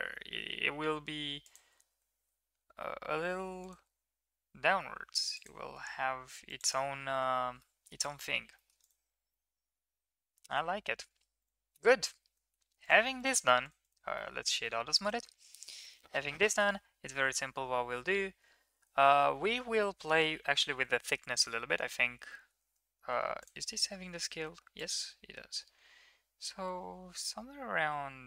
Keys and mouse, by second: 1.7 g, 3.7 g, 5.7 g, 7.6-7.9 middle drag, 8.5 middle click, 9.3-9.8 middle drag, 11.4 click, 12.3 ctrl+s, 12.5 Tab, 12.8 click, 13.2 click, 14.2 middle click, 14.6 middle click, 15.0 right click, 19.7-20.2 middle drag, 22.9 ctrl+a, 24.9-28.2 shift+drag.